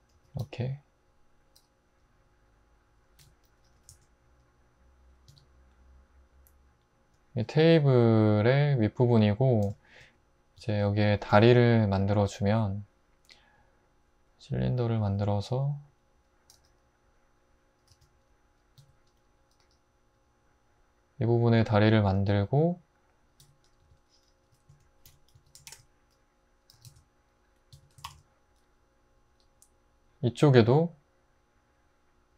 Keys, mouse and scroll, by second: 0.1 typing, 1.6 y, 3.2-3.9 typing, 5.3 Tab, 10.6 click, 11.2 shift+a, 15.0 s, 16.5 g, 17.9 s, 18.8 `, 19.6 g, 23.4-28.5 typing, 23.8 Tab, 27.7 Tab.